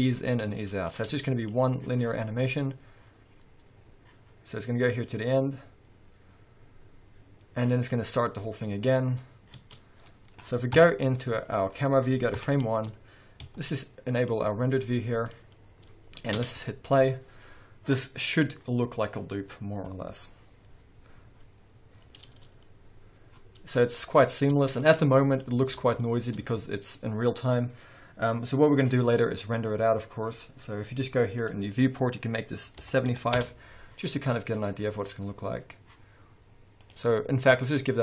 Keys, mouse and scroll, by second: 0.8-13.4 drag, 1.1 space, 9.6 space, 9.8 scroll down 1, 10.7 KP_0, 11.7 scroll up 1, 12.4 shift+Left, 13.4 z, 16.4 space, 18.1 click, 18.9 click, 20.8 click, 22.8-38.0 drag, 24.9 space, 33.4 Return.